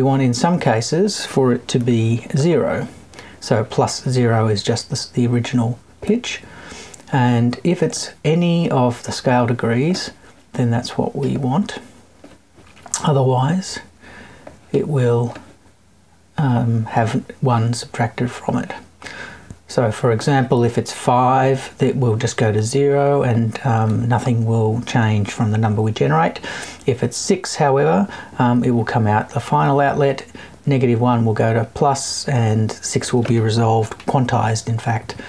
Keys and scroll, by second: 33.8 Left.